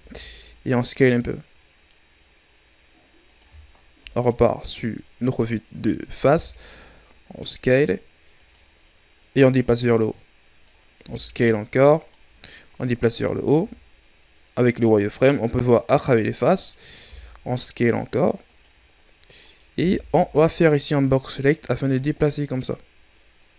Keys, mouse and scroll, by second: 4.0 KP_1, 6.2 s, 9.7-11.0 drag, 11.0 s, 12.7 click, 13.5 z, 17.0 s, 19.4 right click, 19.7 b, 21.6-23.5 drag.